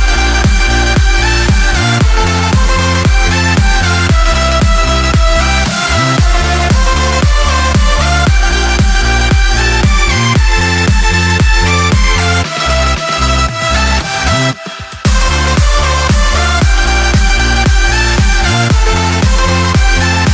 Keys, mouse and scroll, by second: 1.2 click, 3.1 click, 4.0-5.5 typing, 5.7 KP_Enter, 6.9 click, 8.2-9.3 drag, 12.0 click, 13.2 click, 14.1 click, 15.6 click, 16.4 click, 17.2 click, 18.7 1.